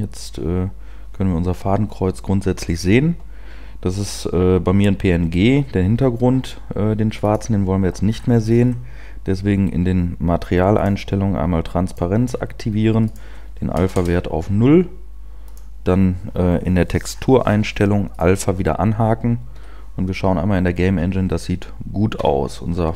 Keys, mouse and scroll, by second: 2.7 p, 13.9 click, 13.9-18.3 scroll down 4, 18.3 scroll down 6.